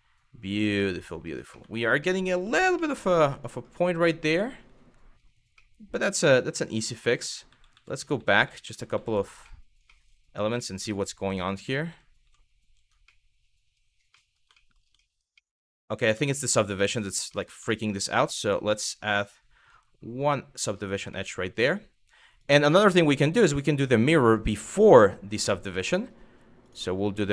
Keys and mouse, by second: 1.1 shift+middle drag, 1.6 shift+middle drag, 2.5-2.8 middle drag, 3.1 click, 3.3 Tab, 3.8-4.8 middle drag, 5.3 middle click, 6.8 middle click, 7.1 ctrl+z, 7.4-9.0 ctrl+z, 9.1-9.4 middle drag, 9.6 middle drag, 10.3 middle click, 10.5 Tab, 11.5 ctrl+z, 11.8 ctrl+z, 12.7 middle click, 13.7 middle click, 14.2 shift+middle click, 14.7 shift+middle click, 15.1 shift+middle click, 15.5 middle click, 15.9 shift+middle click, 16.5 middle click, 16.9 middle click, 17.4 shift+middle click, 18.8 click, 20.8 middle click, 22.0-23.4 drag, 25.3 middle click, 26.3 click, 26.9 middle click.